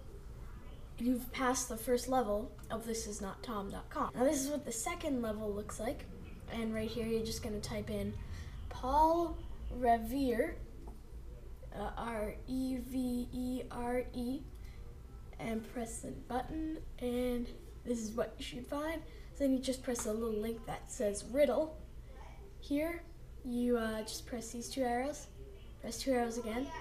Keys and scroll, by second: 4.0 super+c, 7.0 super+v.